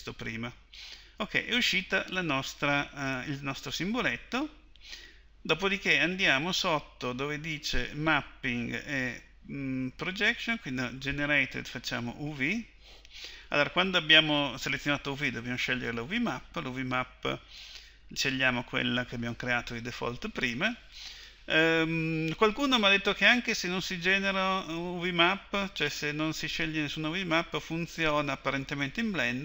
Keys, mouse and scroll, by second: 11.2-13.2 drag, 15.9-20.2 drag.